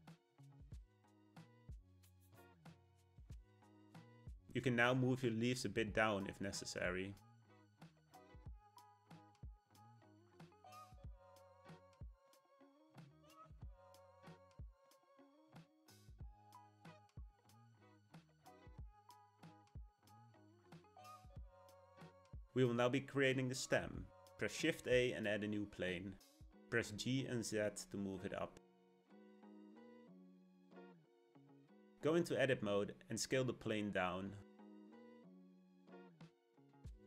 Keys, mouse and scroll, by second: 1.5 g, 2.9-7.5 middle drag, 7.5 click, 8.8-10.5 middle drag, 10.5 ctrl+click, 11.3-13.4 middle drag, 13.4 g, 15.4-17.1 middle drag, 17.1 click, 18.0-24.0 shift+middle drag, 24.0 shift+a, 28.2 g, 31.5 Tab, 31.9-32.9 shift+middle drag, 32.9 scroll up 1, 33.3 s.